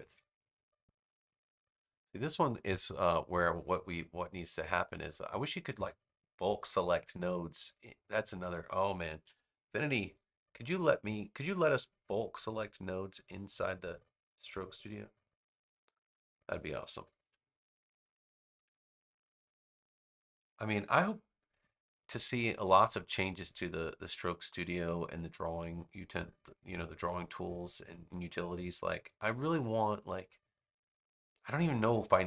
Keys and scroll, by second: 9.1 BackSpace, 17.1 a.